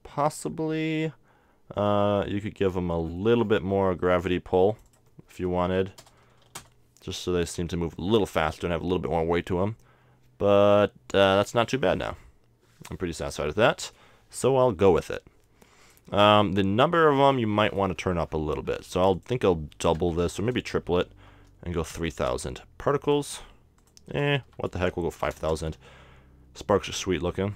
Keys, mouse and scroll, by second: 3.0-4.8 middle drag, 4.8-6.6 drag, 15.8-22.1 drag, 16.3-20.7 middle drag, 22.1 KP_Enter, 23.8-25.5 drag, 26.7-27.5 drag.